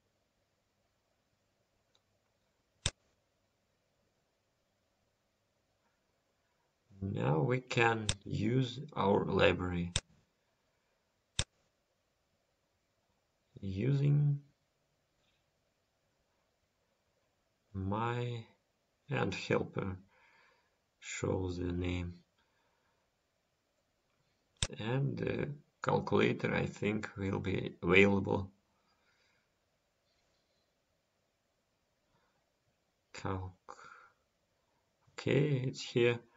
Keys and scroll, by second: 25.7 End.